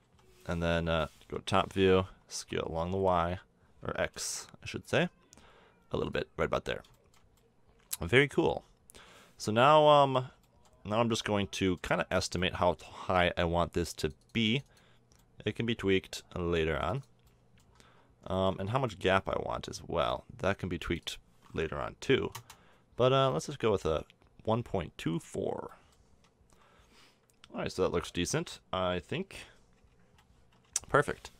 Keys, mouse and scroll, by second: 0.0 KP_7, 1.4 KP_5, 2.4 s, 6.9 drag, 7.2-10.4 middle drag, 11.2 middle drag, 14.0-16.5 drag, 16.7 middle click, 16.8-18.7 drag, 18.9 middle click, 19.6 middle click, 22.3 click, 22.9 middle click, 23.3 middle drag, 25.5-29.8 middle drag, 29.8 KP_1, 30.5 KP_7.